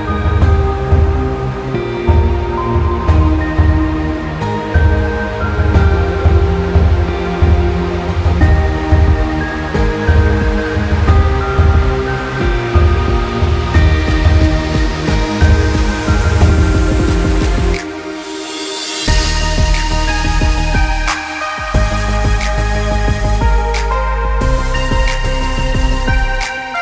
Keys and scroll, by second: 0.0 c.